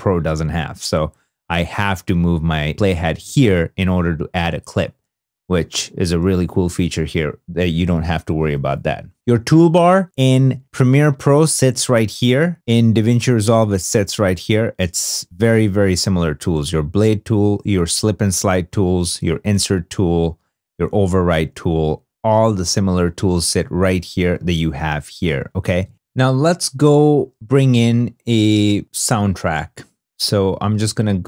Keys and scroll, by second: 5.2 super+Tab, 10.8 super+Tab, 12.5 super+Tab, 23.9 super+Tab.